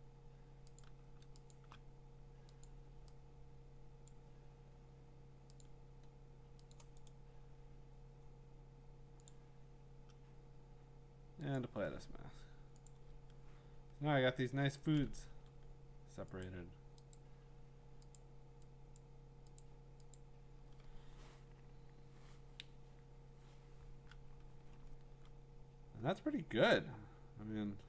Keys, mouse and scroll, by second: 1.0 click, 1.5 shift+click, 2.6 click, 4.1 click, 5.6 click, 6.7 click, 7.1 click, 7.1 right click, 9.3 click, 11.6 click, 13.0 click, 13.3-14.2 scroll, 14.7-15.3 scroll down 8, 15.3 v, 16.4 click, 17.1 click, 17.5 scroll, 18.2 click, 19.0 click, 19.8 click, 20.1 click, 24.6 click, 24.8-26.3 scroll, 27.2-27.8 scroll.